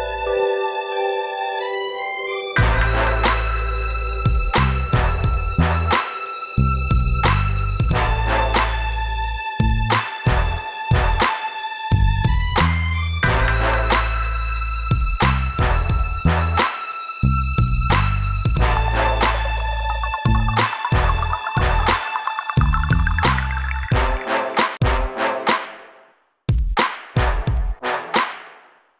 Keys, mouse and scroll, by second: 1.8 click, 2.0 click, 2.1 click, 7.1 right click, 7.2 right click, 8.0 click, 11.1 click, 11.1 click, 11.9 click, 14.4 f, 14.4 scroll down 2, 15.3 scroll up 2, 23.5 click, 24.1 click, 26.4 click.